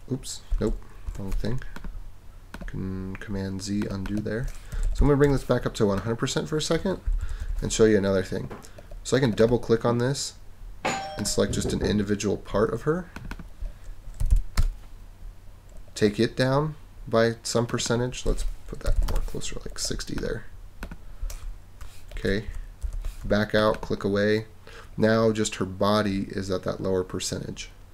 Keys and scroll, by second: 1.1 super+z, 4.5-5.3 typing, 7.1 super+=, 14.0-14.8 typing, 18.6-19.5 typing, 22.5 super+-.